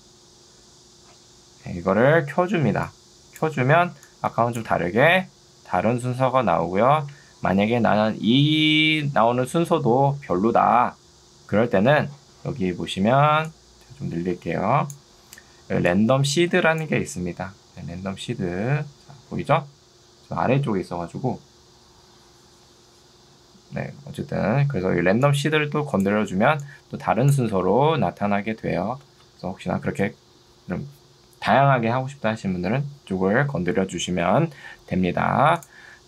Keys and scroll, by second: 1.3 Escape, 4.7 space, 15.3 ctrl+2, 22.5 Escape, 27.5 space.